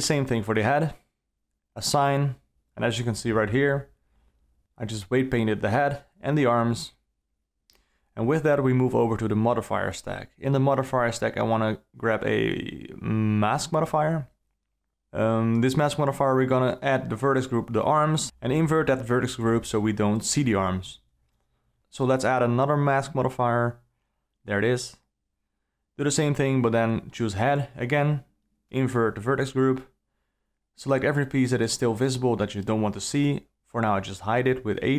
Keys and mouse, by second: 0.0 Tab, 0.0 alt+a, 0.4 l, 1.9 click, 2.3 Tab, 4.0 Tab, 5.2 Tab, 6.5 click, 7.1 Tab, 8.9 click, 9.7-13.0 drag, 16.5 click, 19.2 click, 21.6-24.7 drag, 26.0-27.2 drag, 28.2 click, 29.3 a, 29.6 ctrl+middle click, 30.9 shift+click, 31.7 shift+click, 34.0 h, 34.8 click.